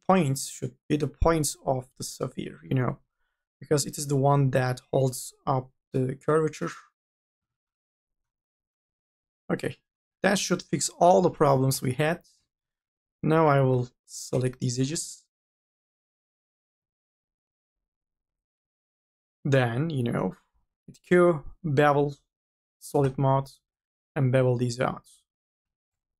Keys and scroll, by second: 10.5 2, 11.1 u, 11.5 l, 20.5 q, 25.5 n.